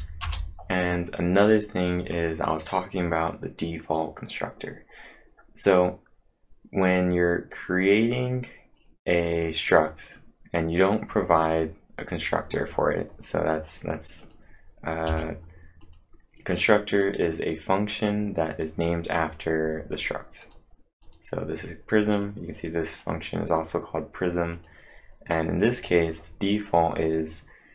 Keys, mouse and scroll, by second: 0.2 Return, 13.3-14.0 typing, 13.5 click, 14.2 click, 15.8 click, 16.8-17.5 typing, 17.0 click, 20.2-20.9 typing, 20.4-23.0 click, 22.8-23.5 typing.